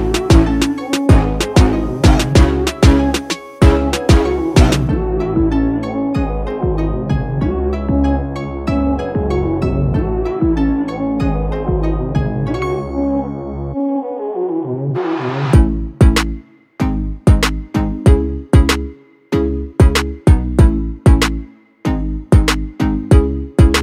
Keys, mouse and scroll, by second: 0.7 click, 4.4 click, 10.5-23.0 click.